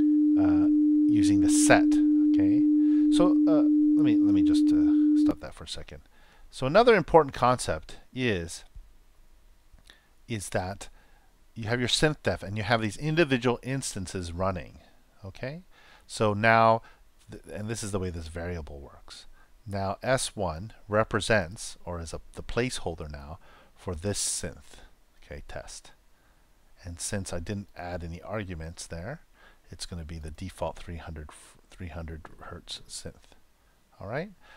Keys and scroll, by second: 5.2 super+..